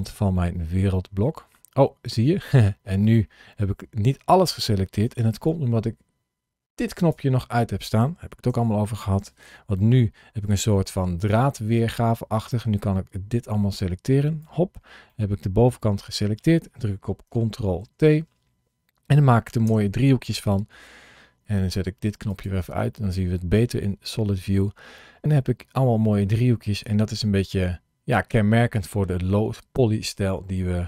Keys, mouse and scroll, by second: 0.2 middle click, 4.9 KP_1, 6.8 click, 8.3 alt+a, 11.0 b, 14.9 middle click, 17.7 ctrl+t, 19.5 Tab, 22.1 click, 22.7 middle click.